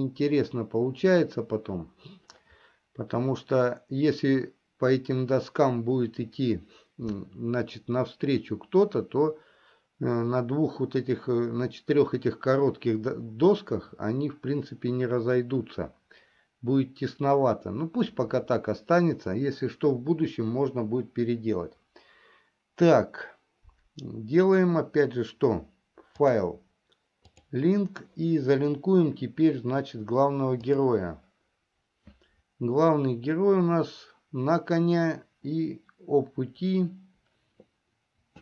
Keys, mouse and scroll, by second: 26.4-28.1 drag.